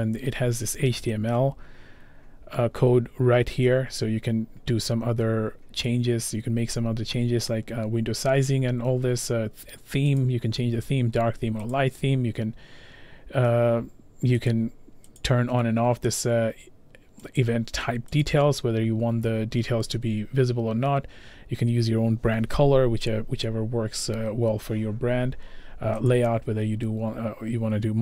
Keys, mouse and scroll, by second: 10.2 click, 11.7 click, 14.5 click, 15.2 click, 17.4 click, 18.2 click, 26.1 click.